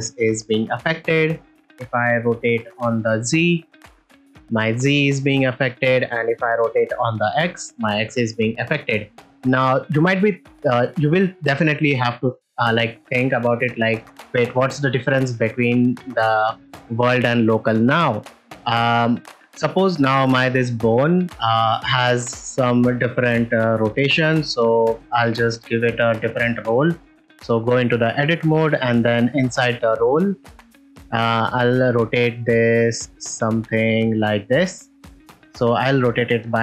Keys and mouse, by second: 2.5 r, 3.1 z, 5.3 right click, 6.9 r, 7.0 x, 12.2 shift+middle click, 12.6 ctrl+middle click, 12.9 middle drag, 13.3 ctrl+middle drag, 13.6 ctrl+shift+middle click, 14.5 middle click, 22.4 click, 27.1 Tab, 31.3-35.8 drag, 36.0-36.6 drag.